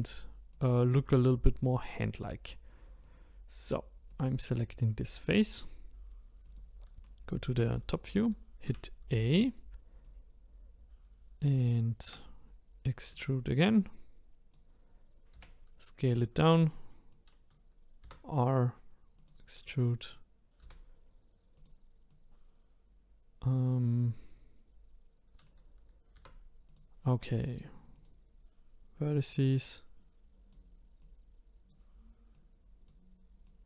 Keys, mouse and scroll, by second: 0.5 click, 1.0 click, 3.0 click, 4.1 click, 5.0-6.4 middle drag, 6.4 click, 8.7 e, 10.0-12.0 drag, 12.0 e, 13.8 click, 15.3 s, 17.1 click, 18.0 r, 20.6 s, 22.1 click, 26.1 r, 27.9 click, 29.3-31.1 drag, 32.3 click, 33.4-33.6 drag.